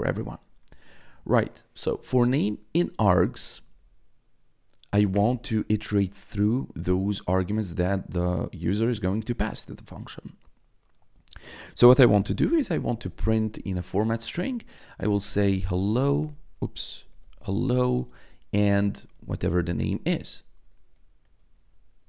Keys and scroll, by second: 3.4 shift+;, 5.1 Return, 5.3 Tab, 11.8-22.0 typing.